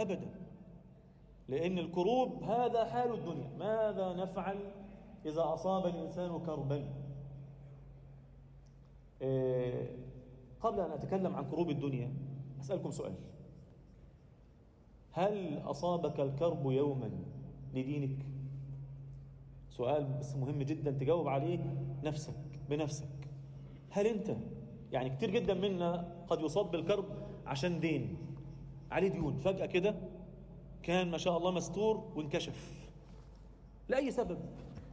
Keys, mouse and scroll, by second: 0.8 Tab, 1.1 a, 2.1 shift+n, 2.7 Tab, 4.5 click, 4.7 click, 5.3-7.8 drag, 6.5 0, 9.5 click, 9.8 scroll down 1, 10.3 ctrl+1, 10.7-11.1 scroll down 1, 11.1-13.2 scroll up 2, 11.4 Tab, 13.5 ctrl+r, 16.4 click, 17.1 click, 17.7 click, 18.3 Tab, 18.4 scroll down 2, 18.8 alt+middle click, 19.3-19.8 scroll up 1, 19.8 click, 20.2 shift+click, 21.3-22.3 drag, 22.8-23.8 drag, 24.2 click, 24.7 Tab, 25.0 a, 26.0 shift+n, 26.5 Tab, 26.9 Tab, 27.5 scroll down 2, 27.8 alt+middle click, 28.6 scroll up 1, 28.9 alt+shift+middle click, 29.2-29.5 scroll up 1, 29.9 ctrl+r, 31.6 Tab, 31.7-32.0 scroll down 2, 32.0 alt+a, 32.3 alt+middle click, 33.1-34.5 scroll up 1, 34.5 scroll up 1, 34.7 click.